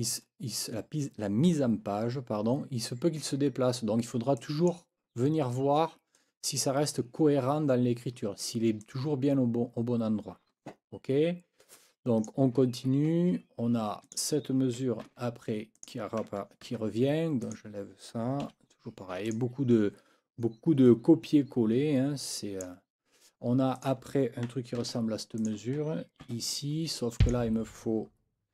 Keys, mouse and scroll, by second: 4.4 click, 6.1 click, 8.8-12.4 drag, 14.0 click, 15.1 ctrl+c, 15.7 click, 16.7 ctrl+v, 17.4 click, 18.4 Delete, 19.3 click, 22.3 click, 23.7 click, 24.8 ctrl+c, 25.4 click, 26.2 ctrl+v, 27.2 click.